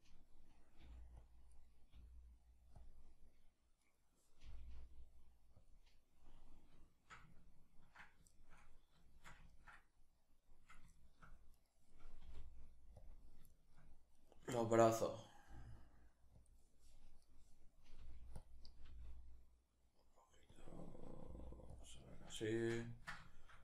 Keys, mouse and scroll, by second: 0.4 g, 0.9 click, 1.1 right click, 1.5 g, 2.5 click, 3.5 right click, 4.1 g, 5.3 click, 6.5-11.2 shift+middle drag, 11.2 right drag, 11.9 r, 12.7 click, 13.1 shift+middle click, 13.8 right click, 14.2-16.1 shift+middle drag, 15.1 g, 16.1 click, 16.9 right click, 17.6 g, 18.1 click, 18.5 g, 20.2 click, 20.9 g, 21.4 click, 22.0-23.6 shift+middle drag.